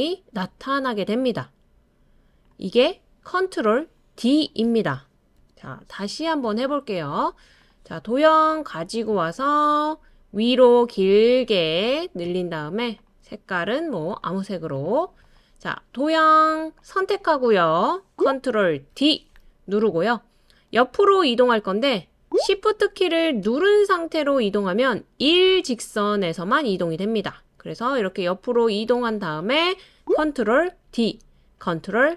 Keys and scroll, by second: 5.4 BackSpace, 18.9 super+d, 30.9 super+d.